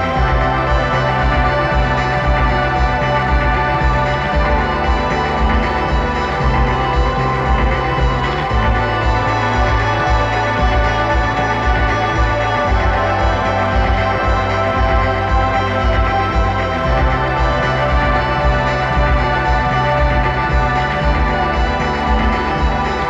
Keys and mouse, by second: 5.5-7.4 drag, 7.8-9.7 drag, 13.1-14.9 drag, 17.7-19.7 drag.